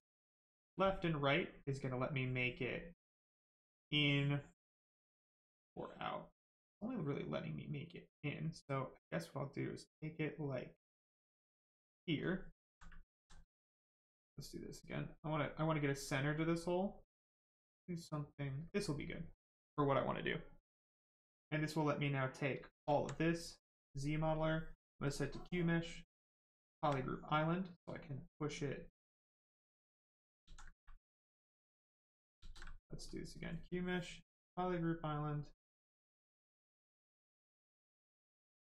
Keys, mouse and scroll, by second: 12.4 alt+right click, 13.0 ctrl+right click, 13.1 ctrl+z, 15.3 click, 19.2 right click, 22.4 right click, 22.6 shift+right click, 22.9 alt+right click, 24.4 right click, 24.4 space, 25.0 click, 25.1 space, 26.2 click, 26.2 space, 27.0 right click, 27.7 click, 30.4 ctrl+z, 31.4 click, 32.4 ctrl+z, 33.0 z, 33.1 space, 35.2 space, 37.4 space.